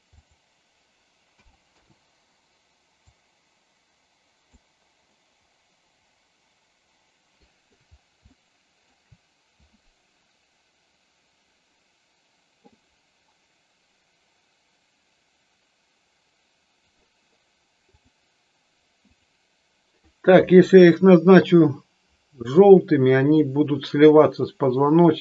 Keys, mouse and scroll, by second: 0.2-2.1 drag, 3.1-4.5 drag, 4.9-7.7 middle drag, 8.2 shift+middle click, 8.8 shift+scroll down 1.